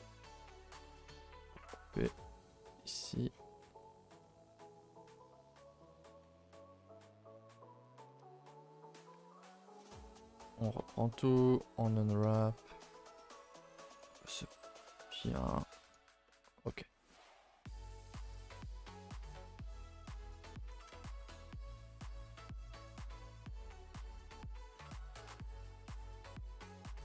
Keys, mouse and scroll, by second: 0.3 a, 0.4 a, 0.6 middle click, 1.1 ctrl+r, 2.7 right click, 3.0-3.8 scroll down 12, 3.8 middle click, 4.5-4.8 scroll up 5, 4.8 shift+middle click, 5.1-5.8 scroll up 2, 5.8 ctrl+r, 7.9 right click, 8.2 a, 8.7-9.1 scroll down 2, 9.1 alt+h, 9.3-9.8 scroll down 8, 9.8 middle click, 10.3 a, 11.6 u, 17.8 a, 18.4 n, 19.3-21.0 drag, 21.0 n, 22.5 scroll up 1, 22.5 middle click, 23.3-24.0 scroll up 1, 24.0 shift+middle click, 24.2-25.7 scroll up 1, 26.6 middle click.